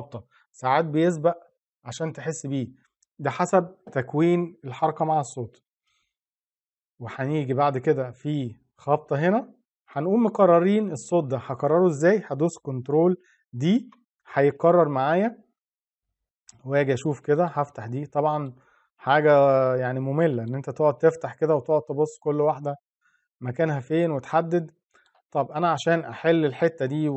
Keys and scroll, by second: 13.4 ctrl+d.